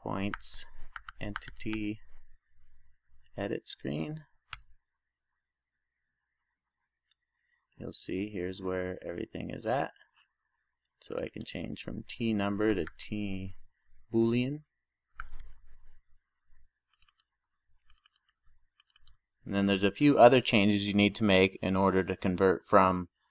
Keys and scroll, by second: 17.5 super+c, 18.4 super+v, 20.0 super+s.